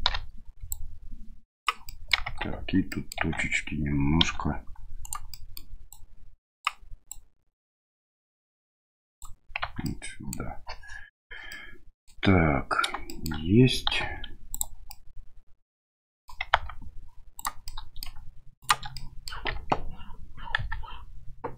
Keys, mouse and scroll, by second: 0.1 o, 0.7 click, 1.9 middle click, 2.2 Tab, 2.9 middle click, 3.2 Tab, 4.2 1, 5.0 right click, 5.3 middle click, 5.9 click, 7.2-9.2 drag, 9.6 Tab, 9.8-10.3 middle drag, 11.5-12.0 middle drag, 13.0 shift+middle drag, 14.0 q, 14.9-16.3 middle drag, 16.5 Tab, 17.3 right click, 17.6 middle click, 18.6 shift+right click, 18.9 middle click, 19.5 KP_7, 20.6 KP_1.